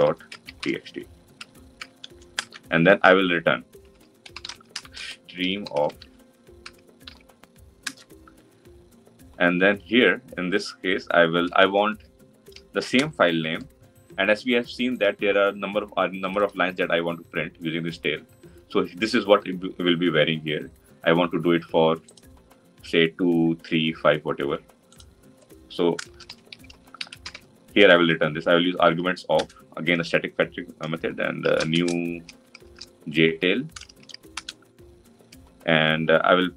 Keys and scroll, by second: 7.7 Return, 29.2 Return.